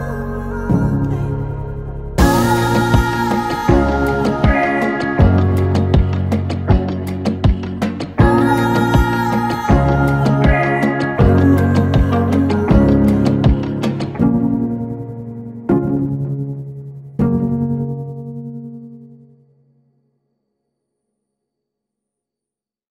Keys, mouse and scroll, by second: 2.3 click, 12.2 ctrl+0.